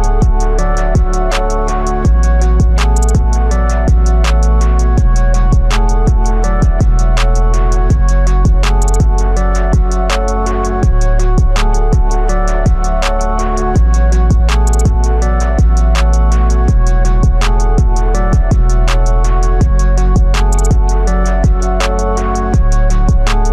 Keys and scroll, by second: 5.2 ctrl+t, 14.8 Return.